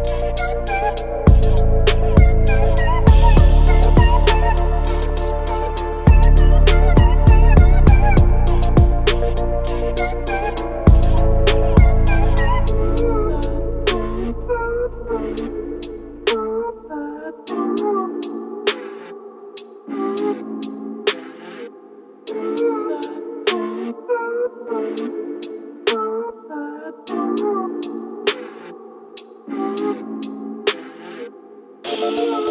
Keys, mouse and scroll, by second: 0.1 click, 3.0 shift+d, 7.2 x, 8.6 click, 12.0 click, 14.1-17.5 drag, 18.4-23.4 drag, 25.6 drag, 26.7-30.7 drag, 32.0-32.5 drag.